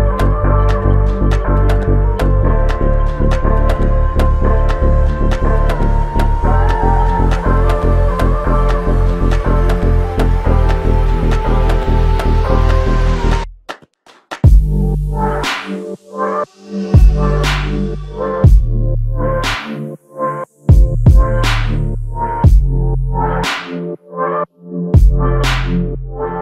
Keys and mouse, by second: 2.3 alt+click, 5.8 alt+shift+click, 8.5 alt+click, 12.5 double click, 21.3 alt+m, 22.5 alt+click.